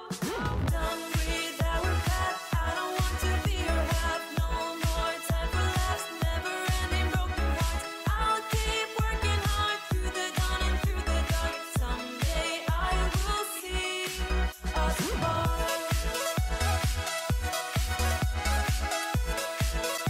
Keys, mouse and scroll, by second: 13.2 click, 14.4-15.0 scroll down 1, 16.9 double click.